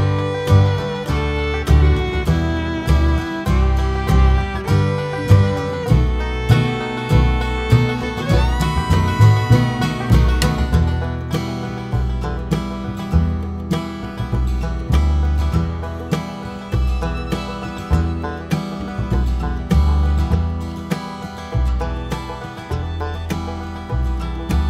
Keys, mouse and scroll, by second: 0.0 scroll down 2, 0.1 `, 5.7-8.0 drag, 7.7 KP_0, 8.0 scroll down 1, 8.5 s, 8.9 click, 9.0 KP_Decimal, 10.7 click, 11.7 `, 12.5 click, 13.3 scroll down 1, 13.5 KP_7, 14.2 KP_1, 14.9 click, 16.1 scroll down 1, 16.2 KP_7, 16.4-16.9 scroll up 1, 16.9 r, 17.8 right click, 18.1 g, 19.6 right click, 20.1 r, 21.5 `, 22.0 KP_1, 23.9 click.